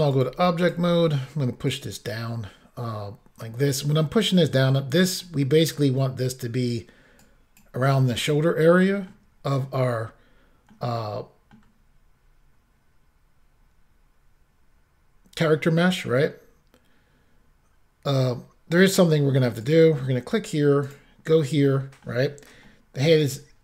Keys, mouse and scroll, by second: 0.1 click, 0.6 click, 1.7 click, 5.2 middle click, 7.2 click, 8.6 middle click, 10.7 middle click, 11.8-12.8 scroll up 1, 14.3-15.5 scroll up 1, 15.6 middle click, 19.7 click, 20.9 click, 21.7 middle click, 22.7 shift+middle click, 23.3 middle click.